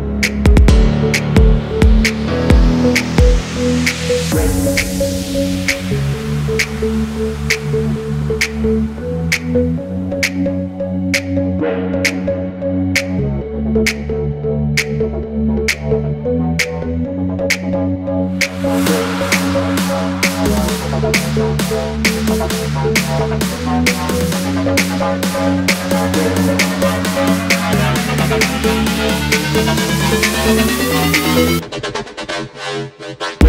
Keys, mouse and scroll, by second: 2.0 shift+click, 3.5 ctrl+z, 4.0 double click, 4.5 shift+click, 6.7 alt+scroll up 1, 7.6 alt+scroll down 1, 8.6 shift+click, 11.2 double click, 11.4 alt+scroll up 1, 12.4-12.9 Down, 14.0 double click, 16.2 ctrl+g, 16.6 alt+scroll up 1, 21.3 scroll down 1, 21.5-22.8 scroll up 1, 22.8-23.1 scroll down 1, 23.1-23.6 scroll up 1, 23.8 double click, 25.4 double click, 25.5 alt+scroll down 1, 25.9 space, 26.2 double click, 26.4 alt+scroll down 1, 27.1 alt+scroll up 1, 27.8 alt+scroll up 1, 28.1 double click, 29.8-30.9 scroll down 1, 30.9 double click, 31.2 alt+scroll down 1, 32.0 alt+scroll up 1, 32.8 shift+click.